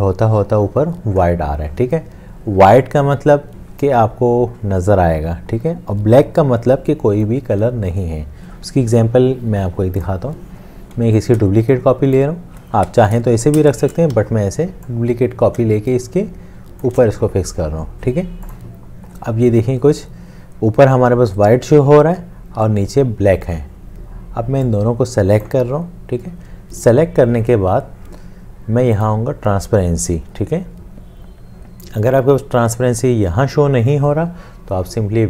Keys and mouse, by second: 11.2 alt+click, 12.9 ctrl+z, 13.7 shift+click, 14.1 ctrl+z, 15.0 alt+click, 15.7 alt+shift+click.